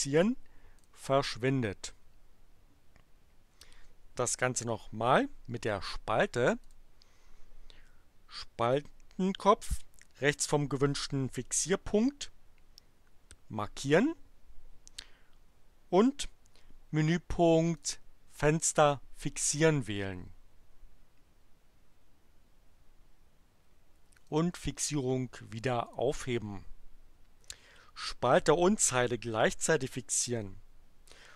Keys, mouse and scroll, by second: 0.7 click, 6.6 click, 17.7 click, 19.5 click, 24.2 click, 25.8 click.